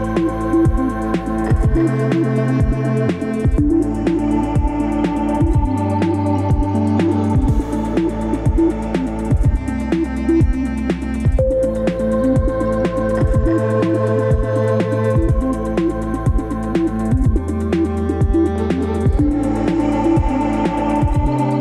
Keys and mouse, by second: 0.1 middle click, 0.9 click, 2.3 Tab, 5.0 ctrl+r, 8.3 Tab, 10.3 ctrl+r, 11.8-12.1 middle drag, 12.5 Tab, 13.7 ctrl+r, 16.2 Tab, 17.7 Tab, 19.0 ctrl+r.